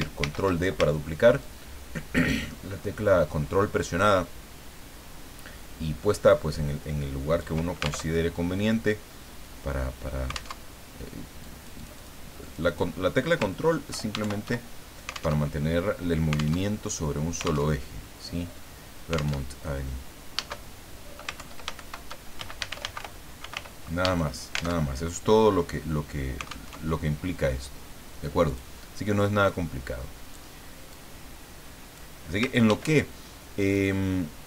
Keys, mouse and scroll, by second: 0.2 ctrl+d, 1.4-7.5 ctrl+drag, 8.1 ctrl+alt+Tab, 10.6 alt+Tab, 11.4 click, 12.4 click, 13.9 ctrl+Home, 14.2 ctrl+shift+End, 15.4 alt+Tab, 16.6 alt+Tab, 17.7 alt+Tab, 19.4 alt+Tab, 21.4 ctrl+Home, 21.7 ctrl+shift+End, 22.3-24.0 typing, 24.8 alt+Tab, 26.7 alt+Tab, 28.5 click, 29.5 click, 30.9-32.1 drag, 32.6 ctrl+d, 33.7-34.4 ctrl+drag.